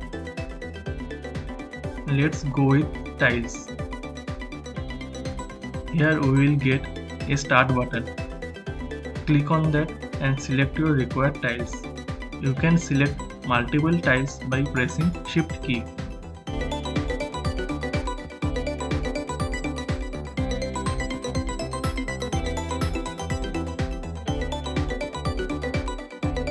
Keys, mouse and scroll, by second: 1.7 shift+h, 3.8 click, 9.1 click, 11.9-21.6 drag, 22.3 click, 23.7 click.